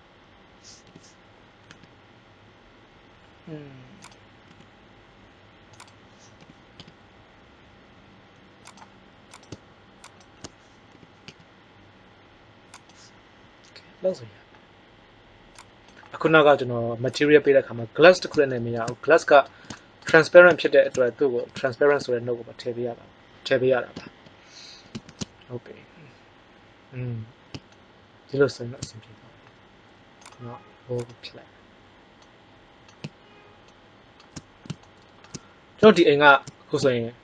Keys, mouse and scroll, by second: 0.8 g, 1.3 z, 4.4 s, 6.3 g, 10.8 g, 15.5 click, 23.8 alt+h, 24.9 shift+z.